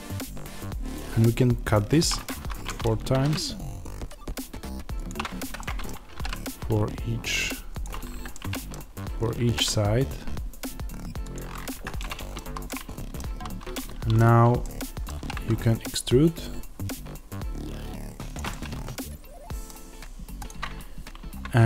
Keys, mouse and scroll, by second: 1.9 click, 2.5-5.0 middle drag, 3.0 ctrl+r, 5.0 click, 5.5-7.7 middle drag, 6.0 ctrl+r, 7.7 click, 8.2-11.2 middle drag, 9.3 ctrl+r, 11.2 click, 11.9-18.3 middle drag, 12.3 a, 13.2 1, 15.1 e, 18.3 click, 18.4-20.4 middle drag, 20.4 click.